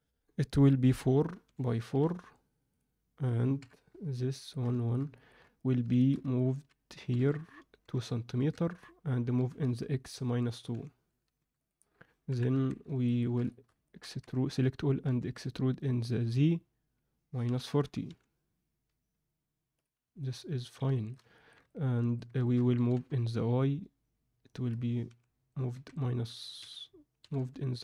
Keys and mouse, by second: 3.5 KP_7, 4.3 ctrl+alt+middle click, 4.7 alt+shift+middle drag, 5.1 ctrl+alt+middle drag, 5.5 drag, 5.8 shift+middle drag, 6.4 ctrl+alt+middle drag, 6.9 g, 9.3 g, 12.2 KP_1, 12.5 Tab, 13.0 ctrl+middle click, 13.4 shift+middle click, 13.8 ctrl+middle click, 14.2 a, 15.0 e, 20.2 middle click, 20.9 alt+shift+middle click, 21.3 ctrl+alt+middle click, 21.6 alt+middle click, 22.4 ctrl+alt+middle click, 22.7 g, 27.2 g.